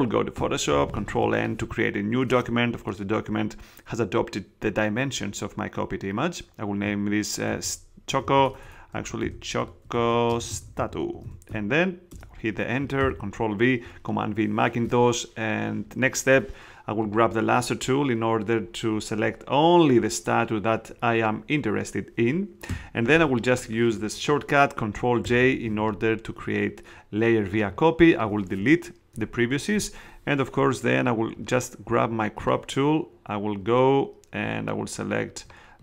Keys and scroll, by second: 1.0 super+n, 7.4-11.7 typing, 12.0 Return, 12.8 super+Return, 12.9 super+v, 25.2 super+j, 29.1 shift+BackSpace.